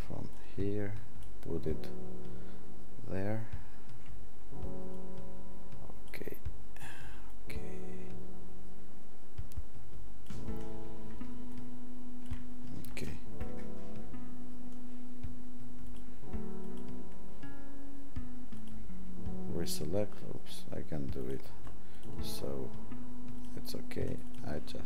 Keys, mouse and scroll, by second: 7.3 click, 12.3-19.5 alt+drag.